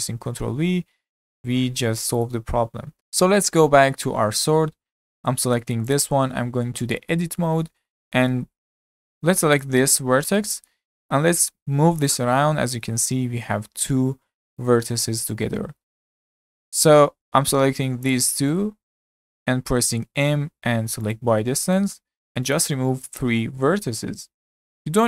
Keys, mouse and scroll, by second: 0.2 ctrl+b, 2.7 scroll down 4, 3.0 click, 3.7-5.0 shift+middle drag, 5.0-5.5 scroll up 4, 5.5-5.9 shift+middle drag, 5.9 click, 6.4 Tab, 6.7-7.6 shift+middle drag, 7.6 scroll up 3, 7.9-8.8 shift+middle drag, 8.8 1, 9.6 click, 10.2 scroll up 1, 10.4-12.2 shift+middle drag, 12.2 g, 16.1 z, 16.6 middle click, 16.7 click, 18.5 middle click, 19.4-20.0 scroll up 1, 20.0 m.